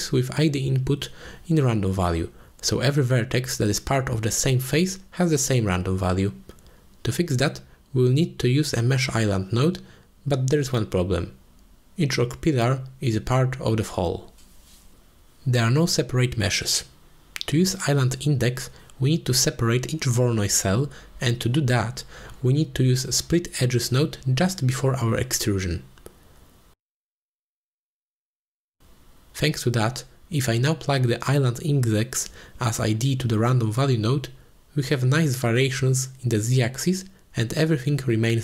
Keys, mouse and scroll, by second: 2.6 click, 4.0 middle click, 4.7-6.4 drag, 6.4 g, 7.0 click, 7.8 shift+a, 12.8 click, 14.1 click, 15.0 click, 15.4-15.8 middle drag, 16.5 click, 16.7 x, 17.4 a, 17.6 a, 17.9 ctrl+s, 18.2 click, 23.1 middle click, 24.1 click, 24.5-25.9 drag, 26.4 click, 28.0 shift+a, 30.6 click, 32.3-33.4 drag, 35.5 shift+middle drag, 38.0-38.4 shift+drag.